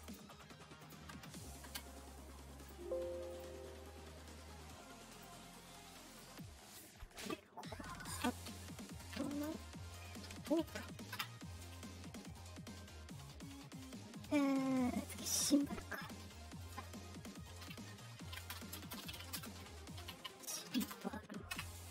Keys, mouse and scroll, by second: 0.7 click, 1.6 Return, 2.5 scroll up 2, 2.5 click, 3.2 click, 5.0 click, 6.0 click, 9.0 t, 9.3 space, 10.1 o, 16.1 middle click, 18.2 BackSpace, 19.3 u, 19.3 space, 20.7 space.